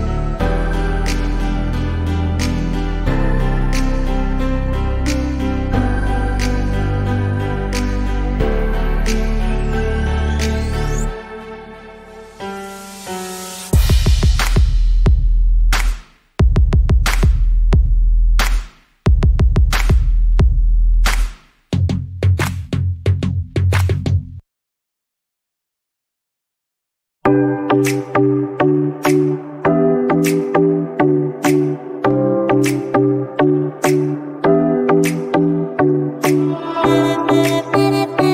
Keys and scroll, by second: 7.9 l, 8.2 o, 9.5 Return, 15.5 a, 19.0 BackSpace, 23.1 w, 32.3 a.